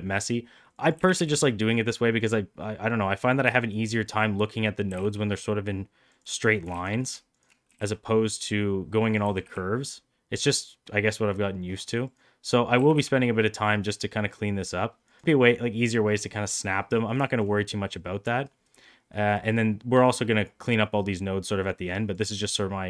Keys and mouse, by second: 0.8 g, 3.6 shift+right click, 4.8 g, 6.6 ctrl+z, 7.2 shift+click, 7.6 g, 9.1 g, 12.3 click, 12.7 g, 16.6 shift+middle click, 17.3 shift+middle click, 19.2 middle click, 20.0-22.1 drag.